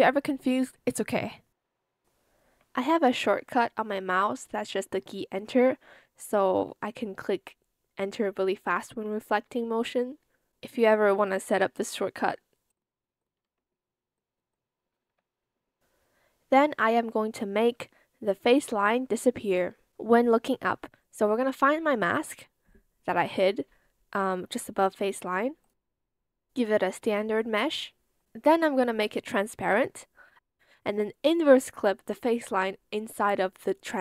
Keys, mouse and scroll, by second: 1.1 ctrl+z, 2.5 ctrl+z, 6.0 Return, 6.5 Escape, 8.8 ctrl+z, 9.4 ctrl+z, 13.3 Return, 15.0 Escape, 28.8 ctrl+c.